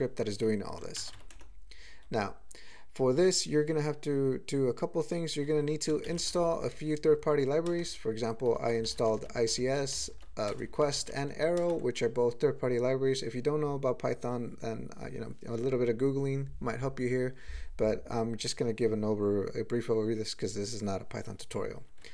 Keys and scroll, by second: 6.0 alt+shift+,, 7.7 ctrl+space, 8.2 ctrl+e, 8.5 ctrl+g, 8.8 alt+m, 9.0 alt+f, 9.2 alt+f, 9.5 alt+b, 9.9 ctrl+n, 10.1 ctrl+f, 10.6 ctrl+e, 10.9 ctrl+g, 11.0 ctrl+n.